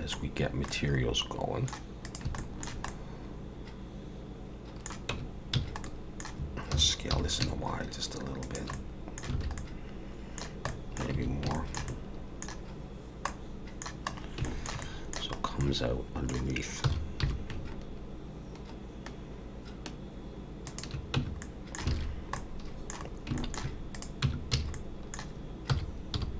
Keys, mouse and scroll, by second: 0.3 scroll down 2, 0.7 middle click, 2.0 click, 2.4 shift+middle click, 2.9 middle click, 5.1 Tab, 5.6 a, 5.8 middle click, 6.7 s, 8.7 middle click, 9.3 alt+a, 9.6 middle click, 10.7 middle click, 11.1 a, 11.5 shift+middle click, 11.9 middle click, 13.3 middle click, 14.1 scroll up 2, 14.5 shift+middle click, 14.8 middle click, 15.4 scroll up 1, 15.6 middle click, 16.8 s, 21.2 Tab, 21.4 middle click, 21.9 alt+a, 22.1 scroll down 1, 22.4 middle click, 23.0 scroll down 3, 23.4 shift+middle click, 23.9 click, 24.2 Tab, 24.5 a, 24.7 middle click, 25.7 s.